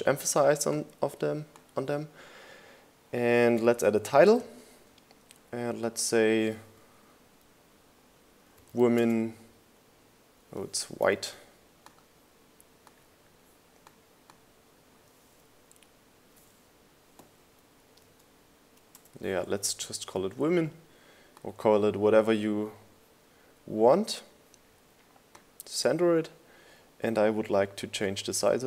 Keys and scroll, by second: 4.5 t, 9.0-10.3 typing, 13.0 super+a, 19.1 space, 20.0 BackSpace.